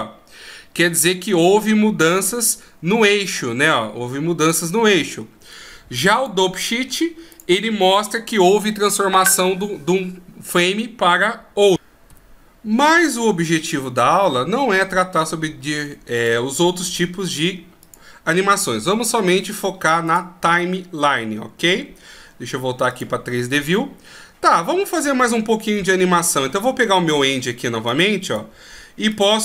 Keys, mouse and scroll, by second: 23.3 click, 25.2 click.